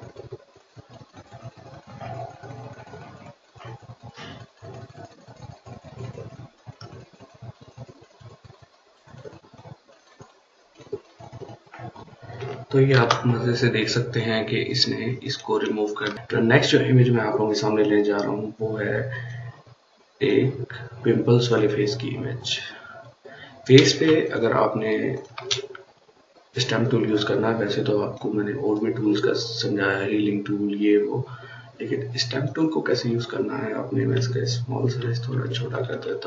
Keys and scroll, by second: 12.7 ctrl+d, 15.9 ctrl+space, 23.9 ctrl+space, 24.3 ctrl+space, 24.4 ctrl+space, 34.0-36.2 typing.